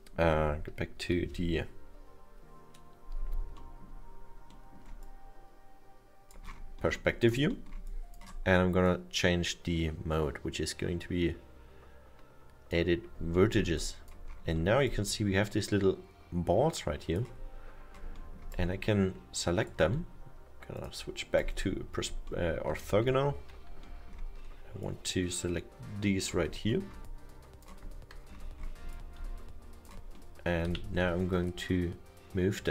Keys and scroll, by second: 1.1 F5, 30.7 w.